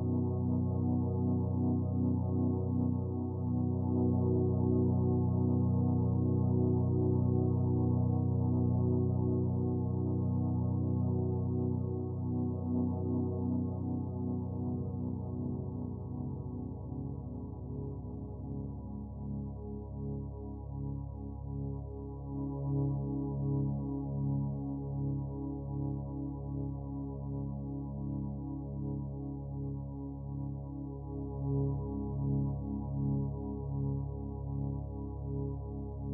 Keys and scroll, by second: 11.4-13.1 typing.